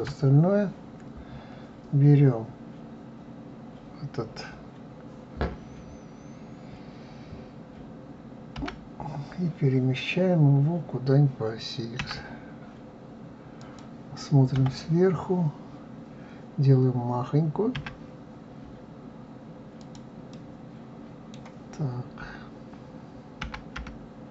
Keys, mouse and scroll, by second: 0.1 KP_Divide, 1.0-3.4 scroll down 6, 14.6 KP_7, 15.5-17.7 scroll down 1, 17.7 s, 20.3-23.3 middle drag.